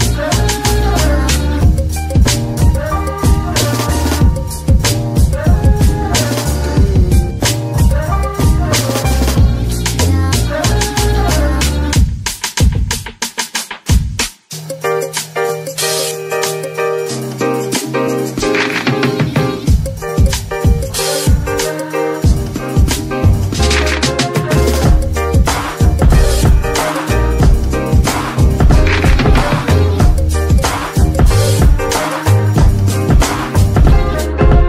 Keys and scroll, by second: 1.0 shift+Escape, 2.4 a, 6.9 shift+s, 9.8 KP_1, 11.7 g, 19.5 g, 24.8 g, 25.3 Escape, 25.3 z, 25.7 g, 26.9 Escape, 32.8 z.